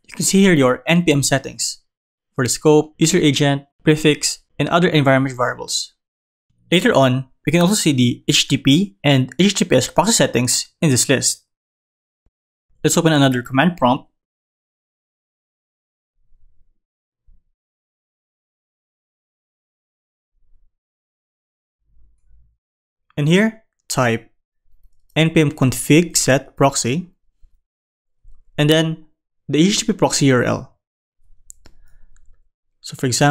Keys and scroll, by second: 12.4 super+Down.